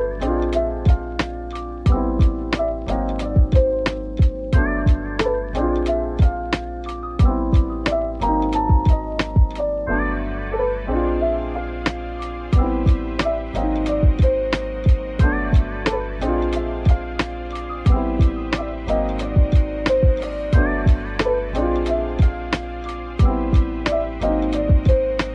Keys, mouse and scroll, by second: 5.6-6.2 scroll down 1, 11.8 scroll down 1, 13.0 middle click, 15.0 scroll up 1, 15.5-16.1 scroll down 1, 19.6 middle click.